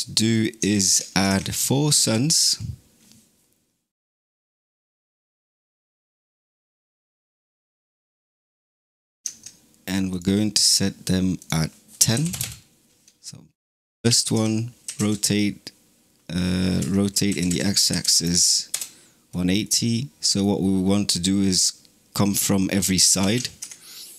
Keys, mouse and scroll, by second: 1.1 shift+a, 10.0 click, 11.4-13.8 drag, 13.8 shift+d, 14.7 r, 17.1 r, 19.5-23.1 middle drag, 23.1 shift+d.